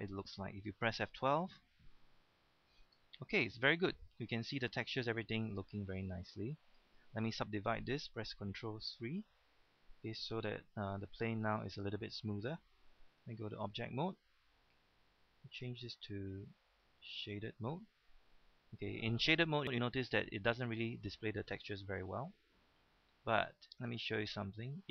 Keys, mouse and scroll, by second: 1.0 F12, 6.6 click, 9.1 ctrl+3, 11.1-11.5 scroll up 1, 12.7-13.2 scroll down 1, 13.2 Tab, 15.5-17.7 drag.